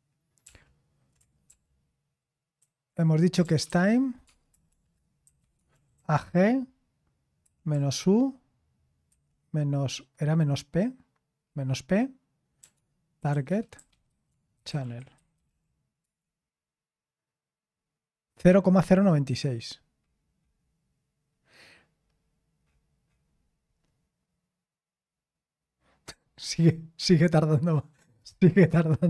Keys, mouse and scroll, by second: 0.4 ctrl+p, 1.5 ctrl+p, 2.6 ctrl+c, 3.1-7.9 typing, 9.1 typing, 11.7-12.6 scroll down 1, 12.6-16.5 typing.